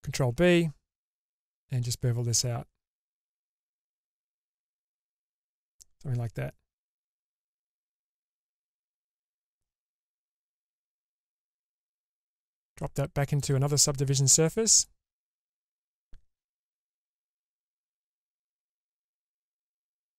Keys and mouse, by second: 0.3 ctrl+b, 8.9 click, 9.1 Tab, 10.1-12.2 middle drag, 13.5-15.0 drag, 17.3-18.9 middle drag, 19.9-20.1 drag.